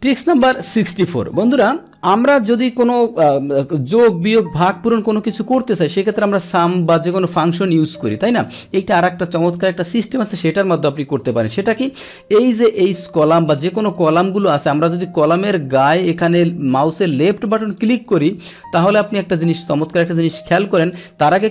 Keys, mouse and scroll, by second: 6.3 click, 8.3 click, 17.6 click.